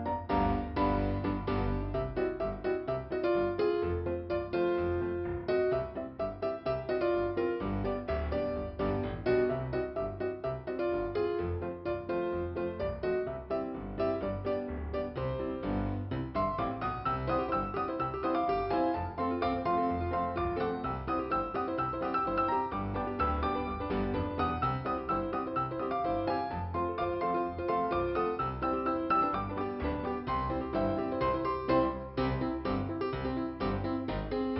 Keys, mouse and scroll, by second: 1.2 click, 5.8 click, 8.5 scroll up 2, 9.6 p, 10.3 scroll down 2, 12.2 middle click, 13.2-13.5 scroll up 1, 14.1-14.5 scroll down 2, 15.5 scroll up 1, 16.3 click, 17.0 click, 17.3 click, 21.3 click, 23.2-23.7 scroll up 1, 23.9 scroll down 2, 26.7 scroll up 2, 27.8-28.2 scroll down 2, 29.3 scroll up 2, 30.7 click.